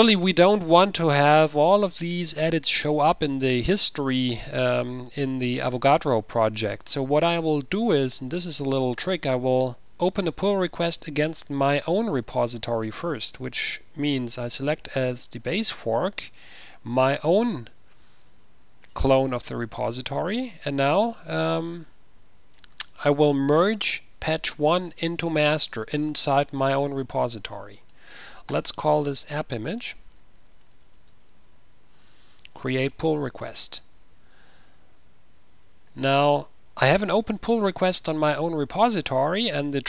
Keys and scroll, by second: 30.5 ctrl+w, 31.1-32.0 typing.